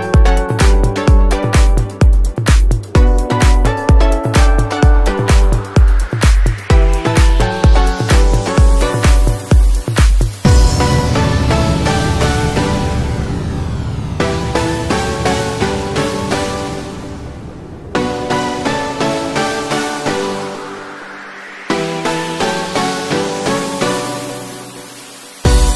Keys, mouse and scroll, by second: 2.1 click, 3.6 n, 4.0 click, 4.1 n, 4.8 middle click, 5.3 scroll down 1, 5.7 scroll up 1, 6.5 Tab, 6.7 middle click, 7.4 click, 8.1 click, 8.7 click, 8.9 click, 9.1 click, 9.4 click, 9.9 click, 11.4-14.2 click, 16.3 click, 17.4-17.8 shift+click, 18.4 click, 19.0 click, 19.3 shift+click, 19.8 click, 20.0 click, 20.9 click, 21.5 click, 21.8 click, 22.2 Tab, 22.5 middle click, 23.6 z, 25.2 middle click.